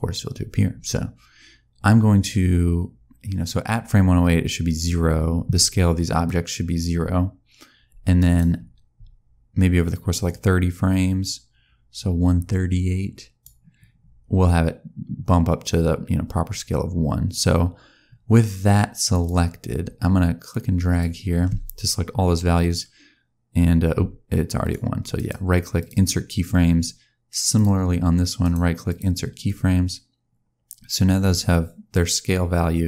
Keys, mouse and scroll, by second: 6.1 click, 10.3 click, 19.0 click, 20.4 click, 25.8 right click, 27.4 click, 28.9 right click.